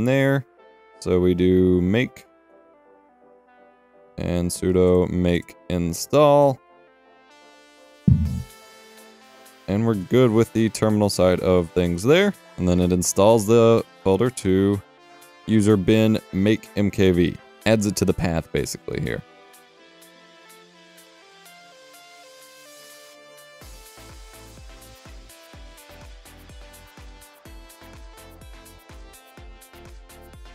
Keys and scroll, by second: 2.2 m, 4.7-7.2 typing, 19.4 typing, 21.2-21.9 typing, 26.5 F12, 27.7 typing, 28.2 Return.